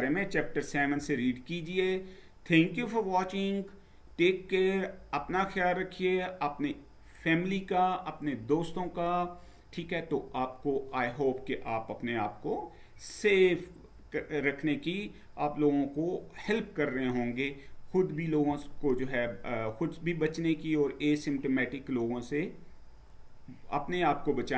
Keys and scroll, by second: 0.7 Down.